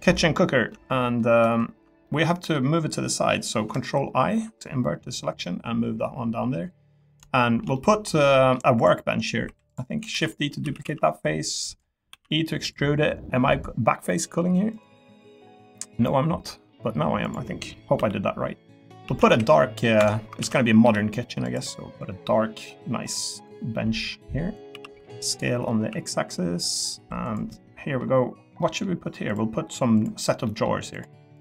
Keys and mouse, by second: 0.5 Tab, 0.7 middle click, 1.1 click, 1.4 Tab, 1.7 Tab, 1.8 Tab, 2.0 click, 2.1 middle click, 2.4 click, 4.0 ctrl+i, 7.3 shift+middle click, 7.7 middle click, 8.7 click, 9.4 3, 9.7 click, 10.1 shift+d, 10.6 s, 10.8 z, 11.6 click, 12.1 e, 12.6 click, 13.5-14.7 drag, 14.8-16.3 drag, 17.3 click, 17.9 l, 19.0 a, 19.3 h, 19.3 g, 20.0 Escape, 20.4 ctrl+z, 20.8 g, 21.4 click, 21.7 middle click, 23.4 click, 24.7 s, 25.0 y, 25.8 x, 26.6 click, 26.9 3, 27.5 middle click, 28.6 middle click, 30.0 click, 30.4 middle click, 30.9 click, 31.3 click.